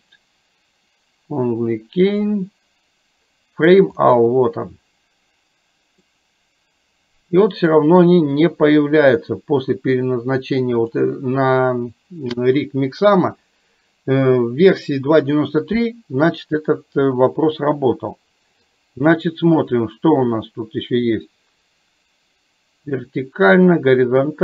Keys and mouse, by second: 6.3-7.8 middle drag, 10.9 click, 18.8-24.4 drag.